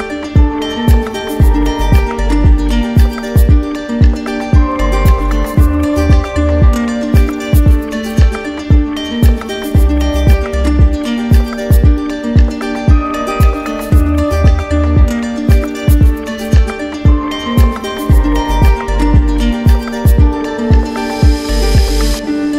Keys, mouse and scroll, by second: 3.9 alt+click, 4.9 ctrl+z, 6.5 right click, 7.2 alt+right click, 7.9 shift+right click, 8.7 alt+right click, 8.8 alt+right click, 10.0 right click, 11.5 right click, 16.8 alt+click, 17.0 ctrl+z.